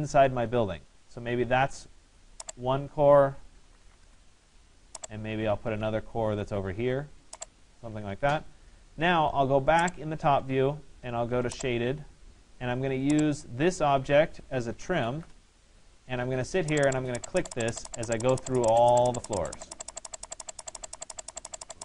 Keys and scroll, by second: 14.9 Return.